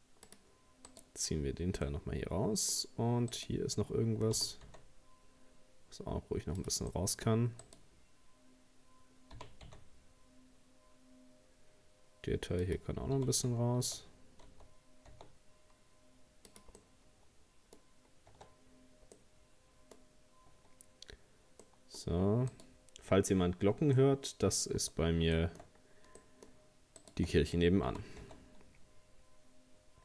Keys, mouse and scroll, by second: 0.9 right click, 1.9-3.3 middle drag, 3.3 right click, 4.3 g, 6.9 middle click, 7.6 right click, 9.3 g, 13.2 g, 16.8-17.8 middle drag, 17.8 scroll down 2, 18.3 Tab, 18.6-19.2 scroll down 4, 19.2 middle click, 20.0-20.5 scroll up 2, 20.5 Tab, 21.1 scroll up 2, 21.6 middle click, 22.5 right click, 24.0 middle click, 24.9-25.4 scroll up 1, 25.4 shift+middle click, 25.8-26.2 scroll up 1, 26.2 middle click, 27.0 shift+right click, 27.9 g.